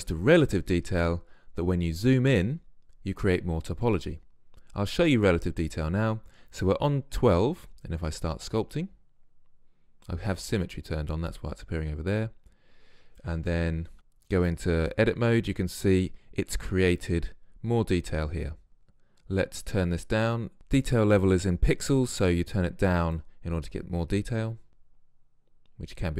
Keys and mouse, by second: 7.9-13.3 drag, 13.9 z, 14.4 Tab, 18.7 Tab, 19.7 click, 22.2-25.9 drag.